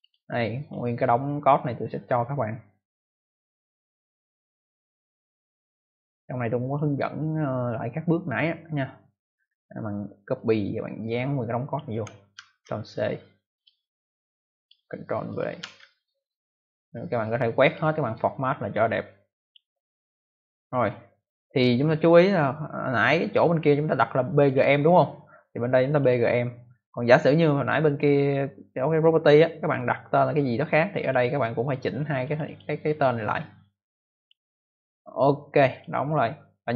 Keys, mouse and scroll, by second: 0.0 double click, 6.6 click, 8.4-8.9 scroll down 2, 10.2 scroll down 1, 10.3 click, 12.3 ctrl+c, 13.5 click, 14.5 click, 15.2 click, 15.5 ctrl+v, 17.1 click, 17.9 right click, 19.3 click, 20.5 click, 24.3 click, 24.4 click, 25.7 click, 25.9 click, 30.8 click, 31.0 click, 32.2 click, 32.4 click, 34.1 click, 35.6 click.